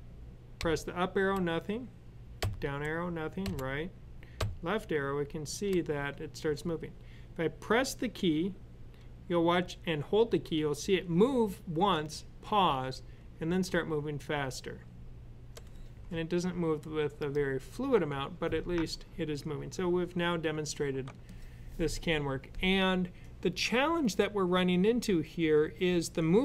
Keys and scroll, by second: 0.4 Up, 0.9 typing, 2.2 typing, 3.3-5.2 typing, 7.6 typing, 13.2-15.0 typing, 15.0 Left, 16.9 typing.